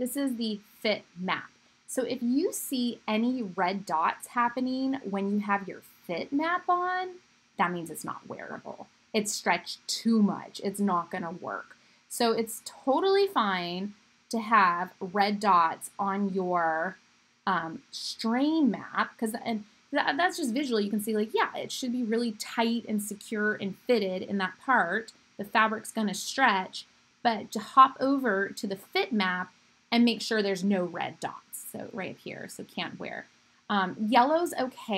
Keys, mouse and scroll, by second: 9.5 middle click, 10.4 middle click, 10.9 middle click, 11.5 middle click, 11.7-34.9 middle drag.